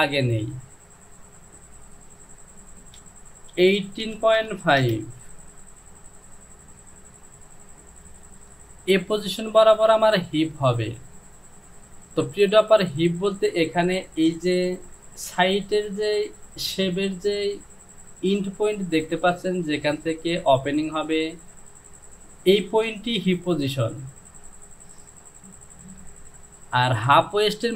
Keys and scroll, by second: 3.6 KP_8, 4.1 KP_Decimal, 4.4 KP_5, 4.9 Return.